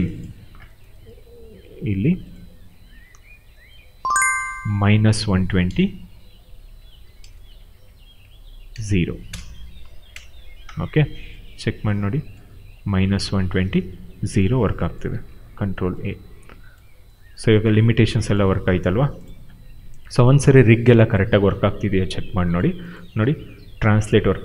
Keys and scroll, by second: 5.6-8.6 typing, 10.0 Return, 15.1 ctrl+a, 23.1 w, 24.3 ctrl+z.